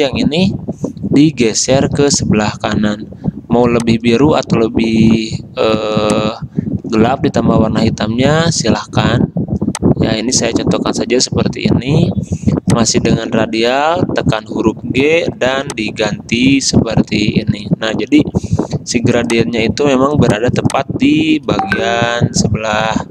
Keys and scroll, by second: 14.3 g.